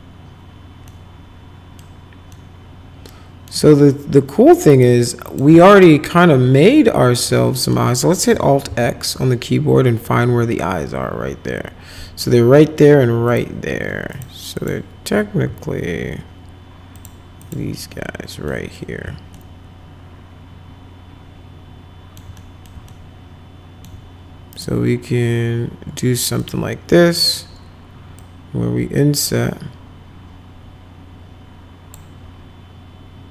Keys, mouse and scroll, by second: 0.9 middle click, 2.3-3.5 middle drag, 4.8 click, 5.3 click, 5.8 ctrl+click, 7.6 middle click, 8.7 alt+x, 13.3 click, 14.1 ctrl+click, 14.6 ctrl+click, 17.0 ctrl+click, 17.4 ctrl+click, 18.5 middle click, 19.4-22.2 alt+middle drag, 22.4 middle click, 22.9 alt+middle click, 24.6 right click, 26.4 click, 28.2-32.0 drag.